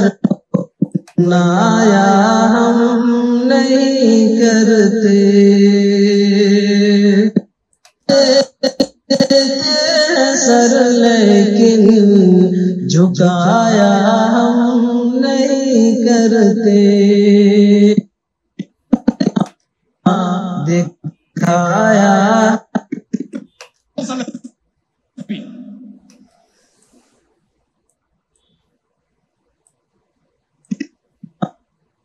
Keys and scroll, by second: 1.2 space, 7.9 space, 19.6 space, 23.6 space, 26.1 space.